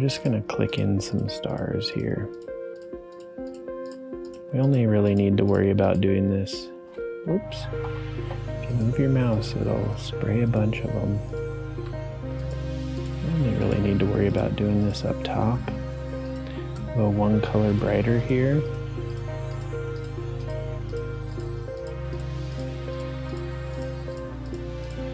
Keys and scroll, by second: 7.2 Return, 7.5 ctrl+z, 7.8 ctrl+z.